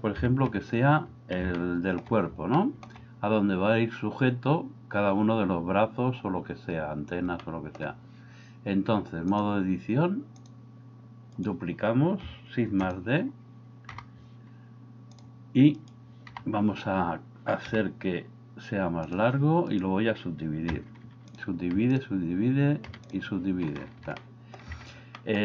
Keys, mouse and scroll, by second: 0.2 KP_3, 1.7 shift+middle click, 2.7 shift+middle drag, 7.4-7.8 shift+middle drag, 9.4 click, 12.8 shift+d, 13.9 g, 16.3 g, 17.7 g, 20.8 w, 21.7 w, 22.9 w, 24.2 shift+middle click, 25.2 middle click.